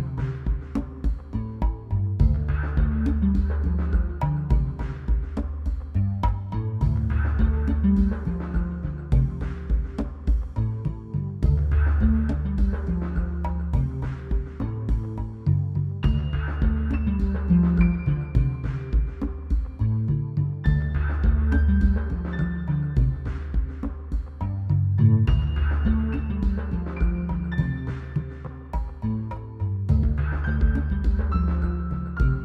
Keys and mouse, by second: 0.2 middle click, 1.5 middle click, 2.4 click, 3.5 z, 3.7 z, 4.5 ctrl+s, 5.4 z, 6.8 ctrl+z, 7.6 KP_3, 8.3 ctrl+z, 12.0 middle click, 14.0 middle click, 15.6 l, 17.1 a, 19.2 ctrl+s, 20.6 click, 21.1-22.6 drag, 22.6 ctrl+s, 22.9 z, 23.5 l, 23.8 z, 24.4 click, 25.0 ctrl+z, 27.4 KP_3, 28.1 ctrl+z.